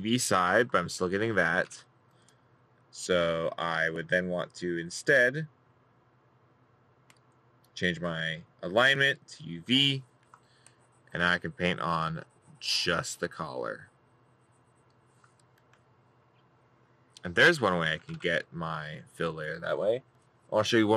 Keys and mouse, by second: 1.7 middle click, 11.6 middle click, 17.2 middle click.